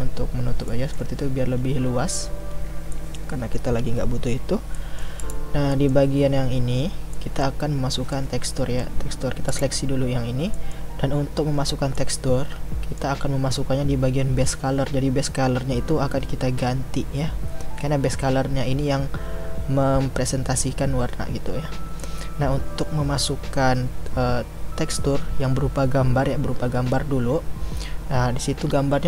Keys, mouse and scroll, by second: 5.2-8.5 drag, 8.5-9.6 middle drag, 9.6 click.